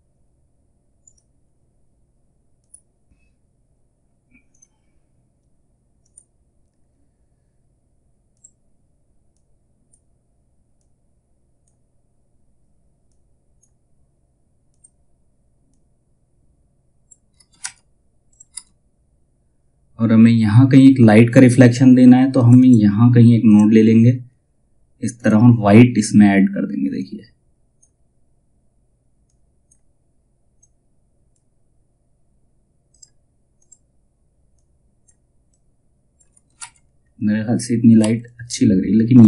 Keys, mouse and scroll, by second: 7.8-16.9 drag, 16.9 space, 17.8 click, 18.0 space, 21.9-35.8 drag, 35.8 space, 36.5-37.5 scroll down 1, 37.5 F2, 37.7 click, 38.9 space.